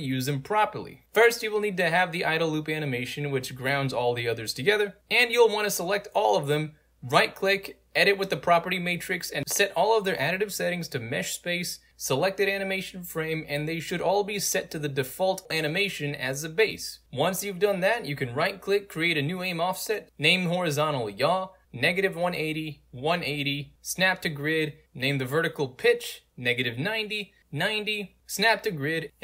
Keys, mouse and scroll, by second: 1.0 click, 3.1 right click, 3.9 alt+right click, 5.4 click, 6.0 shift+click, 6.5 right click, 6.6 click, 9.0 click, 12.6 click, 13.9 drag, 14.7 click, 18.0 right click, 18.4-20.9 typing, 18.7 click, 18.9 alt+z, 19.2 click, 21.3 Tab, 22.0-27.7 typing, 23.8 click, 24.4 click, 28.4 click, 29.1 click.